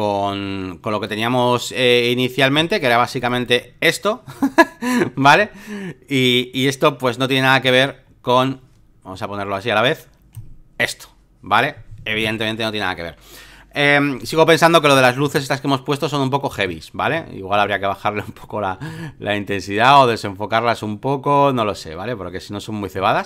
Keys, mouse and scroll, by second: 0.0-4.3 drag, 7.6-12.3 drag, 14.8-18.7 drag, 18.8 shift+click, 19.4-22.9 drag, 23.2 ctrl+click.